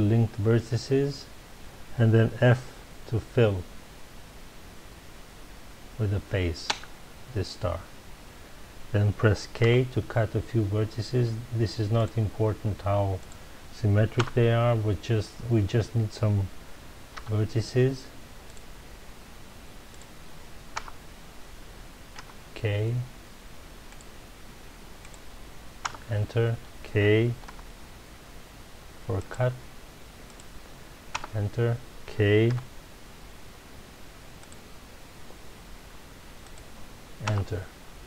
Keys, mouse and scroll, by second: 7.9 f, 9.6 k, 14.2 Return, 17.1 k, 20.8 Return, 22.1 k, 25.9 Return, 27.4 k, 31.2 Return, 32.5 k, 37.3 Return.